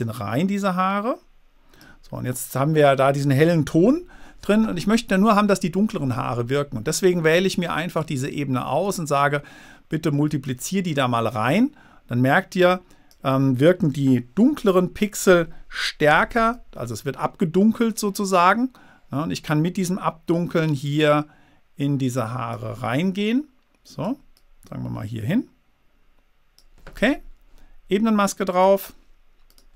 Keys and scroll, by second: 4.1 super++, 14.7 super+d, 16.5 v.